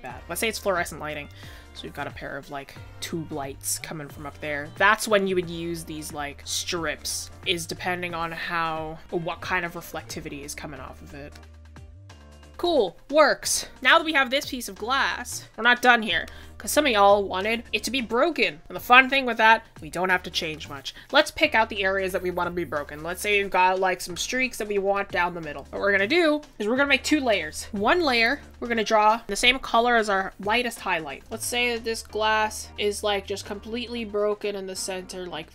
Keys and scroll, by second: 2.7 ctrl+z, 8.3 ctrl+z, 34.9 ctrl+z.